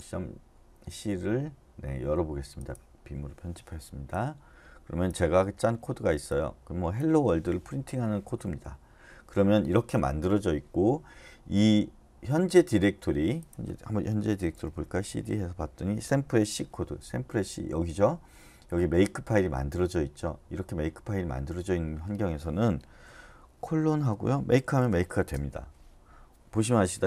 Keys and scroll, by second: 14.4-14.8 typing, 15.0 Return, 23.6-24.9 typing, 25.3 Return.